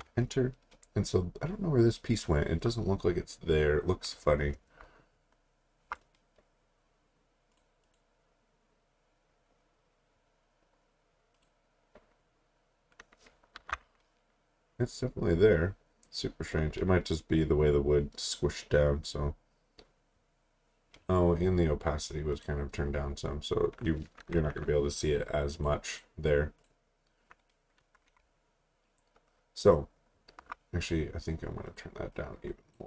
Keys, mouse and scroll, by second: 0.0 Return, 2.9-4.4 scroll up 1, 4.9 alt+scroll up 1, 6.1-7.5 scroll up 1, 7.5 click, 11.3 click, 13.6 t, 25.5 click, 28.3 alt+scroll down 1, 29.7 alt+scroll up 2, 31.7 click.